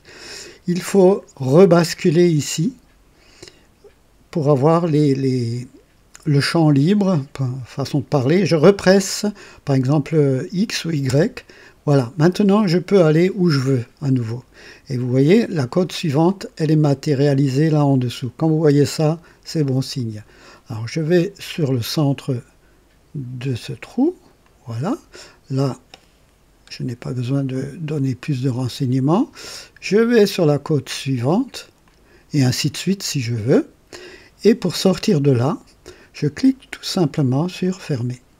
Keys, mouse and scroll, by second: 11.1 y, 24.4 click, 31.8 click, 37.6 click.